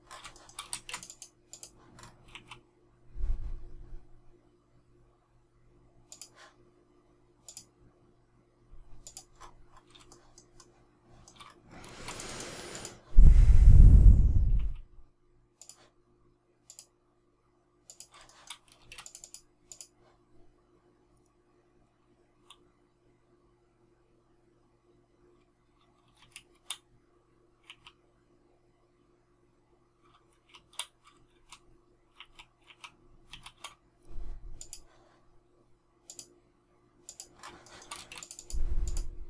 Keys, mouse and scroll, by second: 0.3 shift+middle click, 0.6 space, 2.3 q, 10.0 shift+middle click, 10.5 shift+middle click, 11.8 space, 18.2 shift+middle click, 18.7 space, 26.1 shift+s, 27.6 q, 30.2 shift+q, 31.3 shift+q, 33.2 shift+s, 37.6 shift+middle click, 37.9 space.